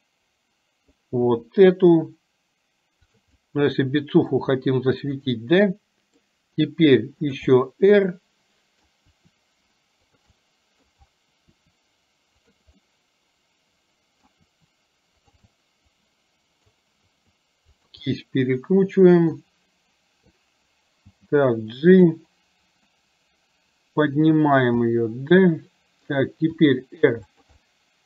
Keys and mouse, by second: 1.3 r, 3.4-4.4 middle drag, 5.7 middle click, 6.5 r, 7.7-8.9 middle drag, 9.2 r, 10.4 middle click, 12.8-14.4 middle drag, 14.5 r, 15.7-16.8 middle drag, 17.2 r, 18.2-19.4 middle drag, 21.2 g, 23.2-24.3 middle drag, 25.0-26.2 middle drag, 26.7 r, 27.7-28.0 middle drag.